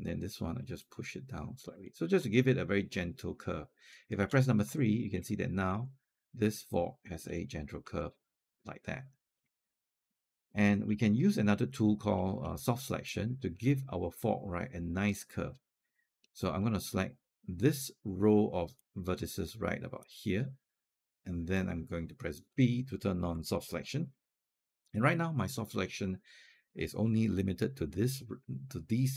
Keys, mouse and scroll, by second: 1.7-3.7 alt+drag, 4.0 3, 4.6 alt+click, 5.7 alt+click, 6.5 alt+click, 7.0 alt+click, 7.8 alt+click, 9.5 alt+middle click, 10.1-10.5 scroll up 2, 10.9 alt+middle click, 11.3 alt+scroll down 1, 11.5 alt+click, 12.0 alt+middle click, 12.4 alt+click, 12.9 alt+click, 15.4 scroll up 1, 15.7 alt+middle click, 16.3 alt+click, 18.6-21.7 drag, 22.3 b, 23.4 alt+click, 26.9-28.1 scroll up 1.